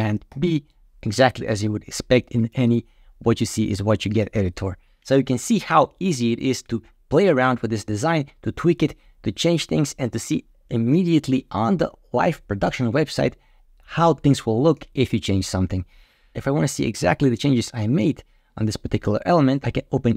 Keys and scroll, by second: 0.2 super+b.